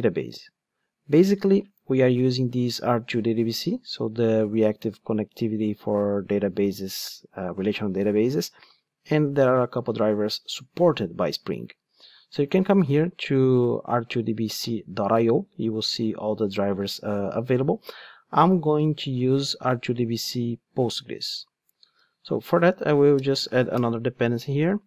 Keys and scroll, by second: 24.2 Return.